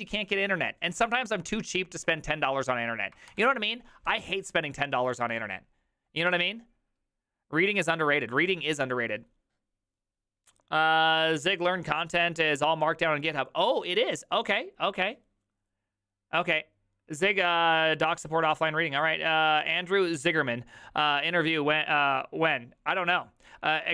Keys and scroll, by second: 3.5 alt+f.